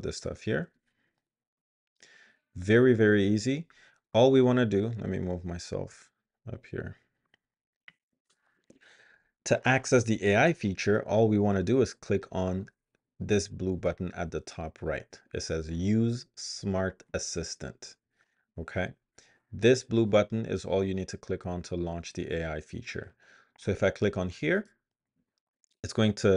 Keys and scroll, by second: 0.2 super+BackSpace.